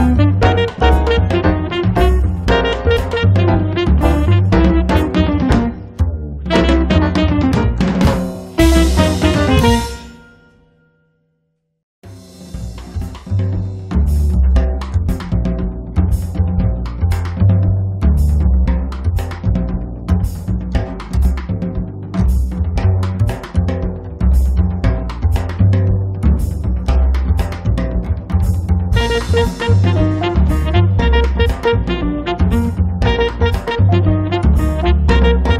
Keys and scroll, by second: 3.5 5, 3.7 Return, 4.2 space, 4.7 Escape, 10.6 l, 11.8-12.8 typing, 18.1-19.3 typing, 33.4 e.